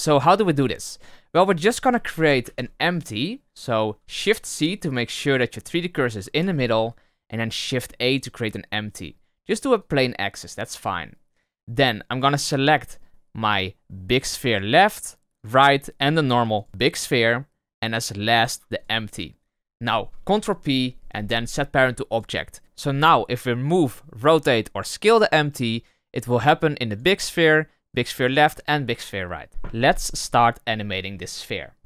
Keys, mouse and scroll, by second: 1.4 middle click, 2.1 shift+c, 2.3 shift+a, 6.3 shift+a, 14.5 click, 15.3 click, 16.0 click, 16.5 shift+click, 18.7 ctrl+click, 20.3 ctrl+p, 25.5 click, 26.8 click, 27.8 click, 28.5 click.